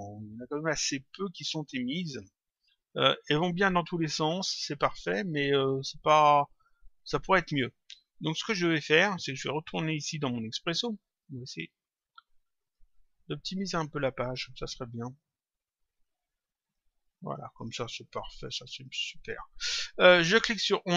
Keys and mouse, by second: 1.4 click, 3.2 click, 7.3 click, 11.9 click, 13.5 click, 16.7 click, 18.3 click, 20.4 click.